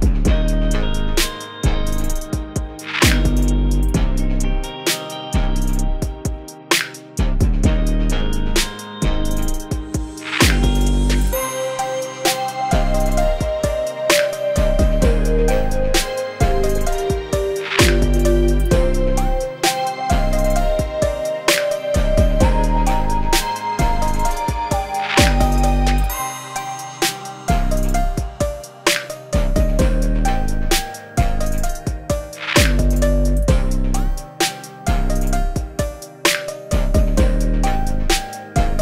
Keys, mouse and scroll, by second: 0.0 g, 0.1 space, 0.2 click, 0.3 space, 0.4 g, 1.0-3.5 drag, 4.1-4.4 click, 4.5 click, 4.8 scroll up 1, 4.9 space, 4.9 click, 5.0 space, 5.3-5.7 click, 5.9 click, 6.6-7.8 drag, 8.1-9.0 alt+drag, 9.6 v, 9.8 click, 10.0 shift+click, 10.1 click, 10.4 ctrl+z, 10.6-11.0 click, 11.1 scroll down 1, 11.1 space, 11.2 click, 11.3 space, 11.8 click, 12.0 Return, 12.1 Right, 12.4 1, 12.5 ctrl+Left, 12.6 Right, 12.8 shift+e, 12.9 Return, 13.1 ctrl+s, 13.3 click, 13.9-14.3 click, 14.4 click, 14.8-15.3 click, 15.2 space, 15.8 click, 15.9 space, 16.6-16.9 drag, 18.7 click, 19.3 ctrl+d, 19.4 click, 19.7-20.0 click, 19.9 click, 20.2-20.6 click, 20.7 g, 20.9 click, 22.3 click, 22.5-23.4 typing, 23.9 click, 24.2 alt+scroll up 1, 24.4-24.7 click, 24.8-25.2 click, 25.3 click, 26.1-26.6 scroll up 2, 26.2-28.3 typing, 26.2 click, 26.6 click, 26.9-27.4 click, 27.4 click, 27.9 shift+click, 28.1 scroll down 1, 28.6 click, 28.8 shift+Return, 29.0 Right, 29.5 Right, 29.6 ctrl+Left, 29.8-31.4 typing, 30.0 Right, 30.1 Return, 30.3 ctrl+d, 31.0 click, 31.1 click, 31.5-32.7 click, 32.8 click, 33.0 g, 33.1-33.5 click, 33.7-34.5 click, 34.5 space, 34.6-34.9 click, 34.9 space, 35.4 click, 35.7 scroll down 1, 36.0-36.9 click, 37.0-37.4 space, 37.4-37.8 click, 37.8 ctrl+d, 38.5 g, 38.7 g.